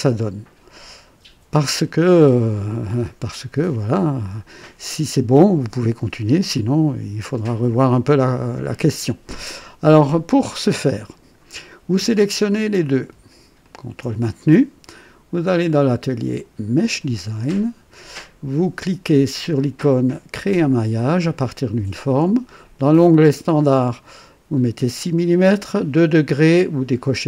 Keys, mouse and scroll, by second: 3.2 scroll up 1, 3.7-4.5 right drag, 7.8-9.6 drag, 9.8-10.5 right drag, 10.6-11.5 drag, 12.2 click, 13.6 ctrl+click, 15.5 click, 16.7 click, 20.4 click.